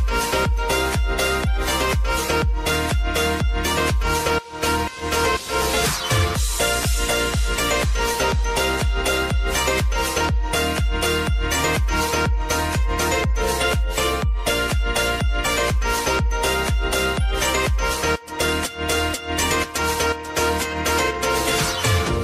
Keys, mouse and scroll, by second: 3.2 Left, 5.4-10.3 drag, 10.3 Left, 13.2-19.7 drag, 21.5 ctrl+d.